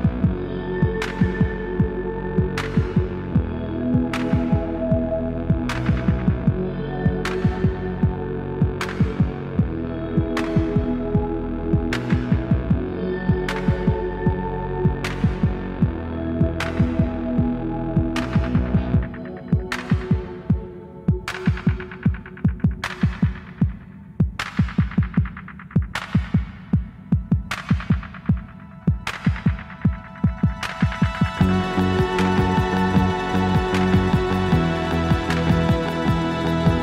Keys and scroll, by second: 1.8 alt+z, 3.2 g, 6.4 g, 7.7 g, 8.6 1, 8.8 Escape, 9.1 x, 12.0 Escape, 20.3 alt+z, 24.0 Tab, 25.3 ctrl+a, 25.8 s, 27.1 Tab, 28.6 ctrl+a, 30.4 ctrl+r, 31.5 g, 35.7 ctrl+a.